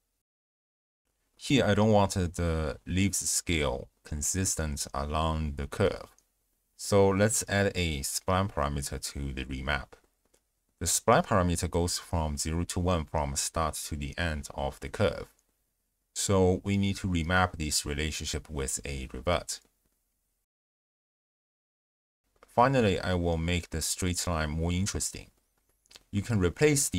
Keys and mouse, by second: 0.3 space, 1.0 ctrl+alt+shift+q, 2.3 click, 3.7 click, 6.2 ctrl+a, 8.7 click, 9.1 click, 10.3 ctrl+shift+click, 11.4 ctrl+shift+click, 11.9-13.3 d, 12.1 click, 14.5 d, 14.9 click, 15.8 click, 16.3 click, 16.6 ctrl+a, 17.5 click, 18.5-19.2 drag, 19.4 click, 19.8 click, 20.1-21.3 typing, 21.4 drag, 22.1 click, 26.0 click.